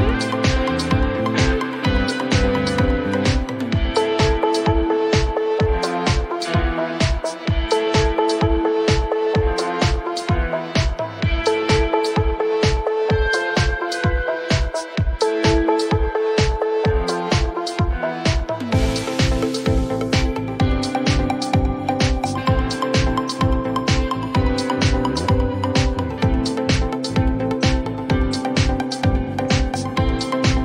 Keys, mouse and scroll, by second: 2.6 click, 2.8-4.5 typing, 5.8 typing, 7.0 click, 7.7-9.3 typing, 11.4 click, 11.5 click, 15.8 click, 18.9 click, 20.2 click, 21.6 click, 24.7 click, 26.0 click, 28.8 click.